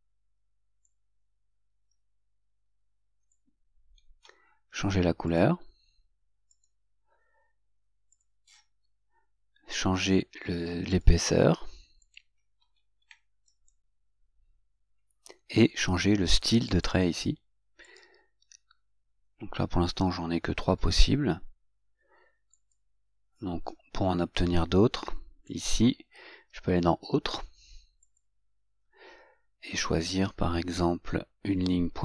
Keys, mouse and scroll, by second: 21.3 scroll down 2, 22.8 click.